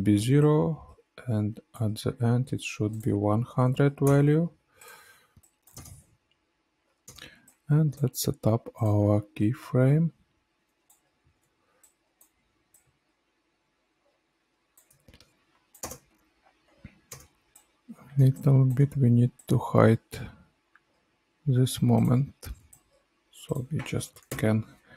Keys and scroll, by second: 3.4 KP_1, 3.4 KP_0, 3.6 KP_0, 4.0 Return, 5.7 space, 10.9 F9, 12.9 ctrl+z, 15.7 space, 24.5 alt+[.